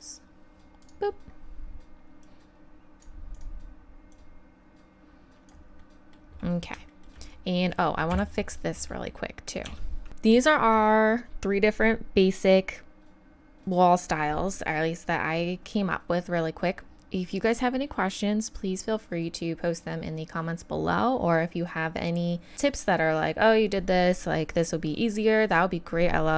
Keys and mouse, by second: 1.4-3.4 middle drag, 3.4-5.5 right drag, 8.1 KP_1, 9.7 Tab, 15.5-16.8 middle drag.